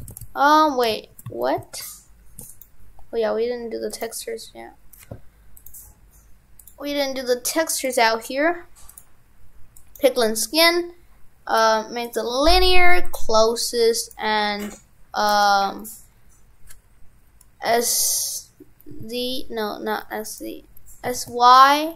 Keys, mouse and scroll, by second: 0.0 shift+f, 3.9 click, 10.1 click, 11.6-12.1 scroll down 1, 12.1 click, 14.0 right click.